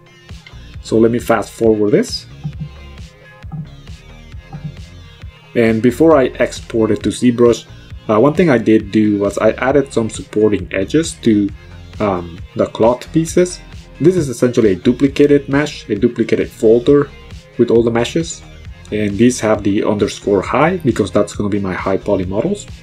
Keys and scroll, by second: 10.3 q, 11.1 ctrl+KP_1, 18.6 KP_2, 18.9 Return.